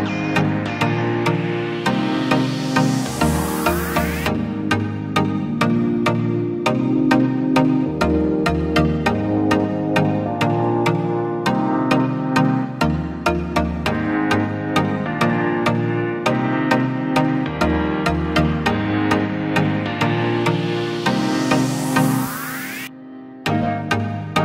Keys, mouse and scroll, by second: 6.6-7.2 alt+scroll down 1, 8.1-10.2 typing, 12.0-12.9 typing, 14.0 typing.